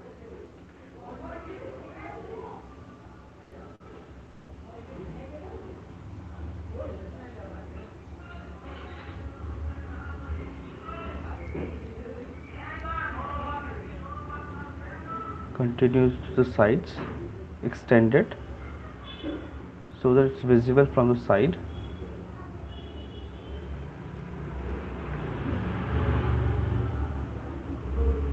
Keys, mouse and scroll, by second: 0.4 click, 2.7 click, 2.9 alt+click, 3.1 click, 3.2 click, 3.4 click, 3.5 alt+click, 4.9 alt+click, 6.1 click, 7.4 click, 7.8 click, 8.8 click, 9.2 click, 9.4 alt+click, 9.6 click, 10.1 alt+click, 11.5 click, 12.1 click, 12.3 click, 13.3 alt+click, 14.3 click, 14.6 click, 15.5 click, 15.8 click, 16.4 alt+click, 16.6 click, 16.8 click, 17.4 alt+click, 17.5 click, 17.8 click, 18.4 alt+click, 18.9 click, 19.7 click, 20.7 click, 21.5 click, 22.8 click, 24.4 click, 25.5 alt+click, 25.7 click, 26.7 click, 27.2-28.3 alt+click, 27.4 click, 28.0 click, 28.2 click.